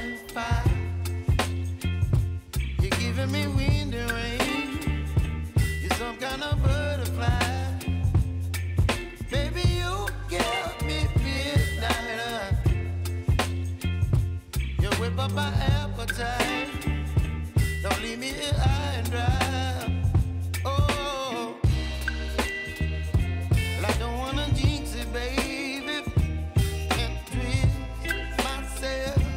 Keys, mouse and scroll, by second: 0.0-1.4 typing, 1.2 click, 3.5 space, 4.0-9.9 drag, 9.9 j, 11.4-13.3 drag, 13.6 t, 14.2 click, 15.3 Return, 15.8 space, 17.9 space, 18.4 click, 20.5 space, 23.2 space, 24.3-29.0 drag.